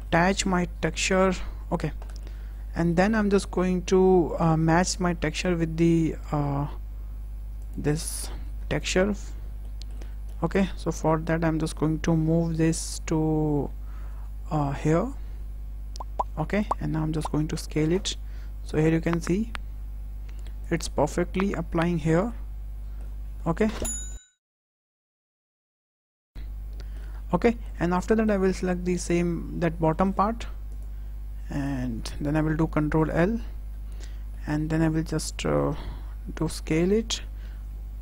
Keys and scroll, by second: 8.4 ctrl+l, 12.8 g, 17.0 s, 24.6 w, 25.2 ctrl+a, 25.4 ctrl+l, 25.9 s, 33.0 ctrl+l, 36.1 s, 37.3 g.